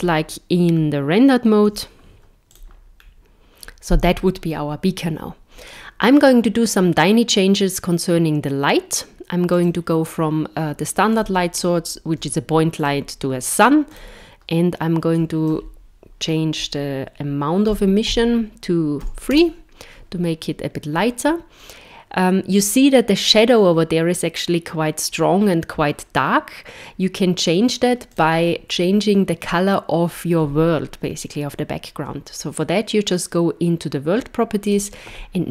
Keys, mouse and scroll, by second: 0.7-1.5 scroll down 1, 1.7 z, 3.0 scroll down 1, 9.5 click, 11.2 click, 12.8 click, 28.1 click.